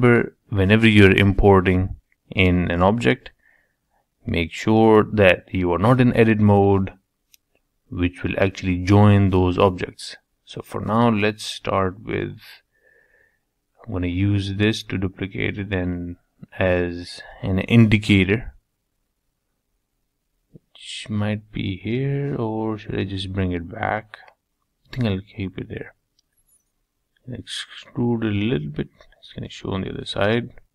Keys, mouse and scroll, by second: 0.0 ctrl+z, 0.3 ctrl+z, 0.9 ctrl+z, 1.2 ctrl+z, 1.6 ctrl+z, 1.9 ctrl+z, 2.6-3.6 middle drag, 3.6-4.1 scroll up 1, 4.1-5.7 scroll down 1, 5.7-7.3 middle drag, 7.7-8.9 middle drag, 8.9-9.9 scroll up 3, 9.9 click, 11.1 shift+d, 13.3 g, 14.9 s, 18.0 g, 21.7 g, 23.9-25.8 middle drag, 26.1 e, 27.5-29.3 middle drag, 29.8 click, 30.4-30.7 shift+middle drag.